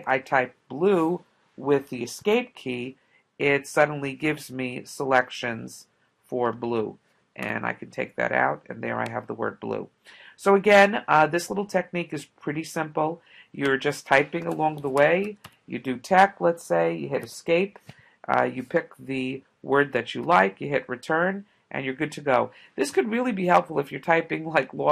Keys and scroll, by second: 4.7 Down, 6.5 Return, 7.5 BackSpace, 14.6-15.7 typing, 17.3 Escape, 19.1 Down, 20.2 Return.